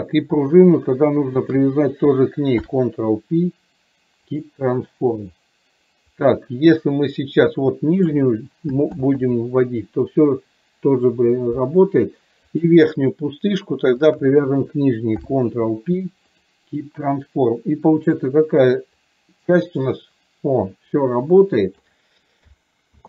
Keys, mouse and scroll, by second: 2.7 ctrl+p, 6.2 click, 6.4-8.3 drag, 12.7 click, 14.2 shift+click, 15.3 ctrl+p, 18.0 click, 19.0 click, 19.3-21.8 drag.